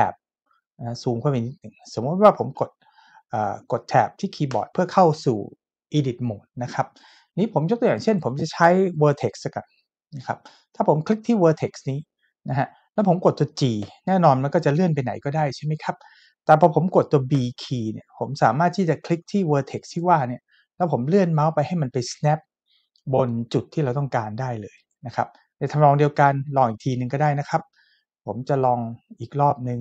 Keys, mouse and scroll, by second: 2.6-3.6 shift+middle drag, 4.6 Tab, 8.1 click, 13.8 g, 17.3 b, 24.8 click, 28.8 Escape.